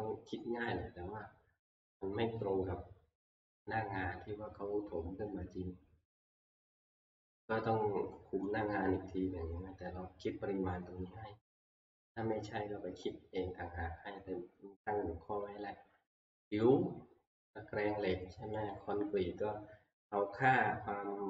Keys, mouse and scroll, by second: 3.4 scroll, 8.5-9.1 scroll, 9.1 middle click, 16.4 click, 18.7 click.